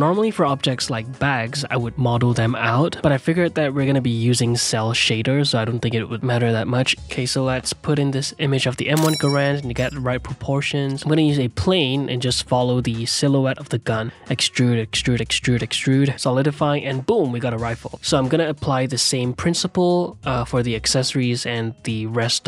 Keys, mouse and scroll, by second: 0.8 ctrl+z, 0.9 click, 1.4 f, 1.7 click, 2.5 ctrl+z, 2.7 click, 3.6-6.6 typing, 5.4 Tab, 5.5 shift+click, 6.4 ctrl+r, 7.1 Tab, 7.5 middle click, 8.2 s, 8.5 s, 8.9 g, 10.0 middle click, 10.4 r, 10.9 g, 11.2 s, 12.2 click, 12.7-14.4 typing, 13.4 click, 13.8 click, 15.7 g, 16.2 ctrl+a, 16.5 click, 16.9 e, 17.2 g, 17.7 ctrl+click, 18.0 shift+e, 18.7-19.8 drag, 19.8 middle click, 19.9 e, 20.3 middle click, 21.1 g, 22.2 shift+e.